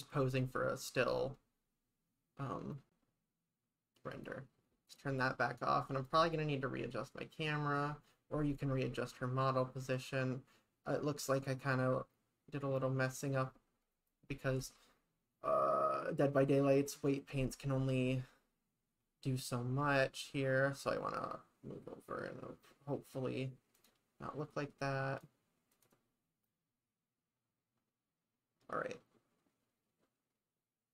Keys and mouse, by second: 0.0 click, 1.0 click, 4.1 click, 4.9 click, 23.8 click, 25.3 click, 26.5-30.9 drag.